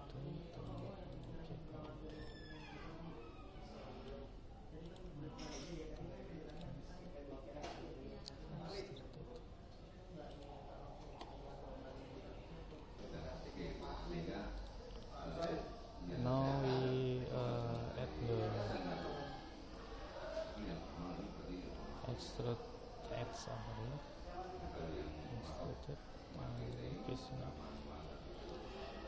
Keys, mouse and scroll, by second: 1.2 click, 2.0 click, 2.4 middle click, 2.9-4.5 middle drag, 6.5 click, 6.5-8.1 right drag, 8.2 e, 12.7-13.8 middle drag, 16.2-17.6 middle drag, 17.6-19.4 drag, 20.6-24.9 middle drag, 24.9 e, 27.3 middle click, 28.5-29.0 middle drag.